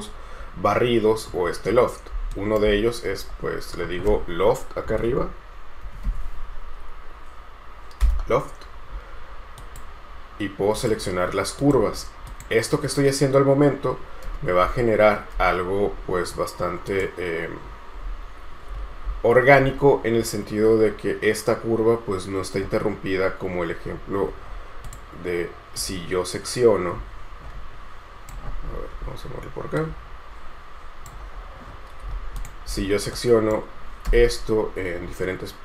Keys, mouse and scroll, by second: 1.9-2.3 scroll up 1, 2.5 shift+right click, 3.5-4.0 scroll down 1, 4.8-6.8 typing, 8.2 Return, 14.4 space, 15.6 space, 16.1 scroll down 1, 24.7-26.6 scroll down 1, 33.3 right click, 34.3 space.